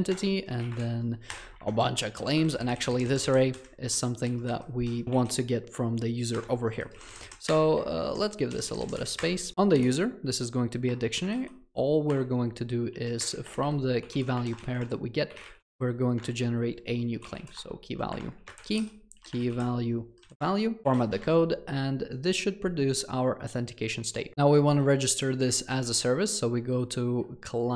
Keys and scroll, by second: 2.2 Escape, 2.7 ctrl+shift+Left, 4.0 ctrl+shift+Right, 4.3 ctrl+shift+Left, 7.3 Return, 12.3 Return, 20.8 ctrl+alt+l, 25.7 ctrl+c.